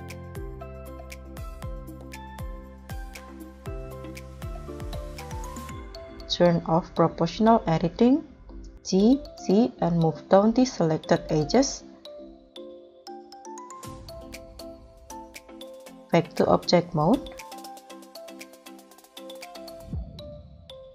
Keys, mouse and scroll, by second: 0.3 middle click, 2.0 ctrl+click, 2.6 scroll down 2, 3.0 scroll up 1, 3.7 middle click, 4.9 m, 4.9 g, 6.4 Escape, 8.9 g, 9.2 z, 17.8 scroll down 2, 18.2-18.6 middle drag.